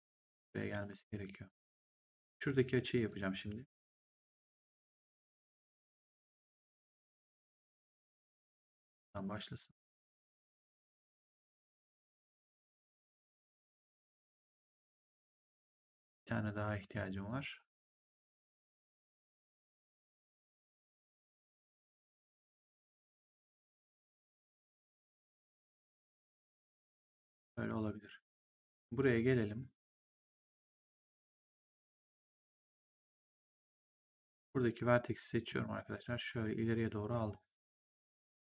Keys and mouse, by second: 3.0 click, 8.0 click, 10.2 click, 12.5 click, 14.3 click, 16.1 click, 21.9 click, 24.2 click, 28.6 click, 34.2 click, 35.4 click, 38.1 click.